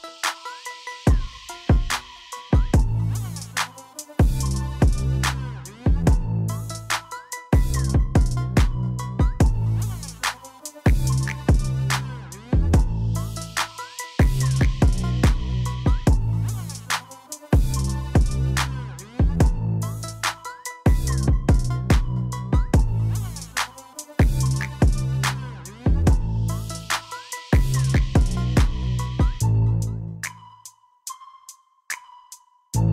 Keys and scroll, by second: 0.2 Tab, 5.0 alt+a, 13.1 Tab, 15.4 x, 16.6 Tab, 26.8 ctrl+j, 28.6 w, 32.5 q.